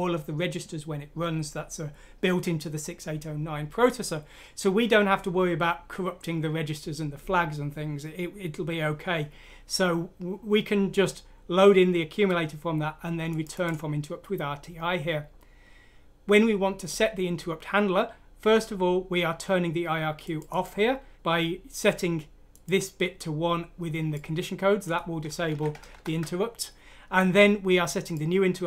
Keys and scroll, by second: 25.9 Right.